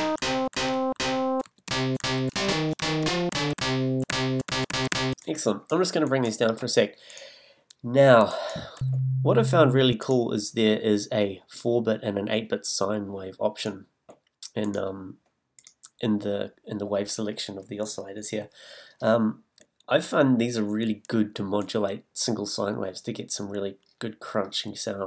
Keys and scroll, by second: 8.8 a.